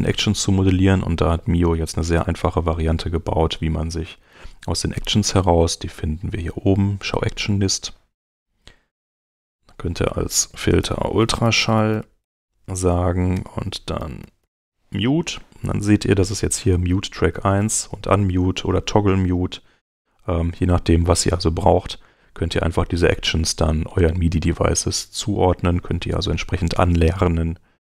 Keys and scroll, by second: 3.4 super+Tab, 10.4-15.0 typing, 10.8 super+l.